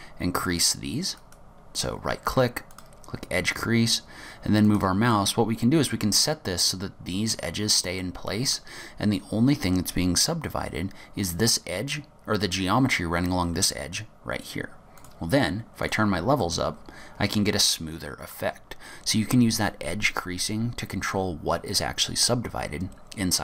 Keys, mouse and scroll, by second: 0.5 click, 1.3 right click, 5.2 middle click, 8.1 middle click, 10.4-11.2 scroll up 1, 11.2 scroll up 1, 15.1 click, 15.9 click, 16.5 middle click, 18.7-19.5 scroll down 3, 23.3 scroll down 4.